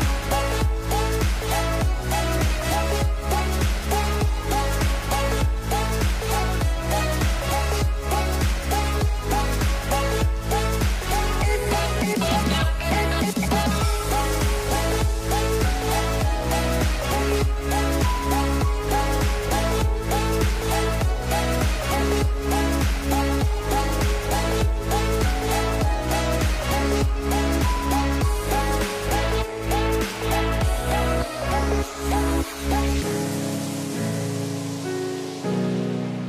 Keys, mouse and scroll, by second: 1.6-3.5 middle drag, 3.5 c, 7.4 s, 9.3-11.2 scroll up 5, 11.2 click, 15.0 ctrl+z, 17.0 c, 18.8 g, 20.7-22.6 middle drag, 22.6 a, 30.1-32.0 middle drag, 32.0 shift+click, 34.1-36.1 middle drag, 36.1 s.